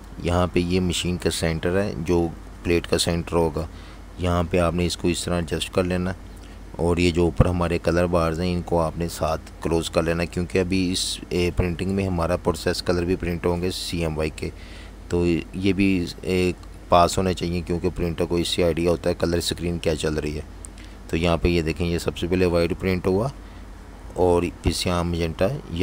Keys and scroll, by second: 0.0-0.7 typing, 4.1 super+y, 4.5 super+0, 5.5 v, 5.7 space, 10.7 typing.